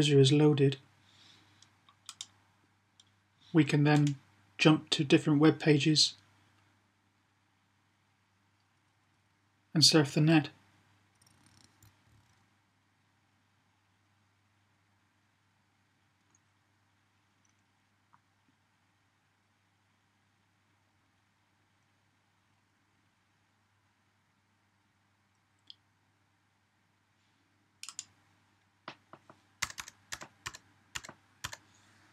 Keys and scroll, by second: 31.7-32.1 typing.